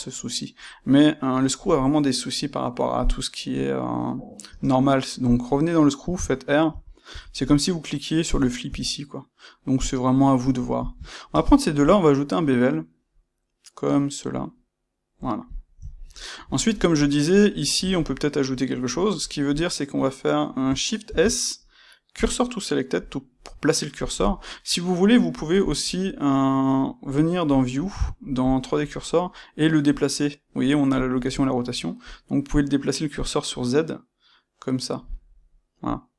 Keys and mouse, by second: 4.4 space, 9.8 click, 10.7 shift+drag, 11.3 space, 11.9 space, 15.5 click, 15.8-19.5 ctrl+middle drag, 19.5 click, 21.0 shift+s, 23.0-25.3 middle drag, 25.3-27.5 drag, 28.4-36.1 drag.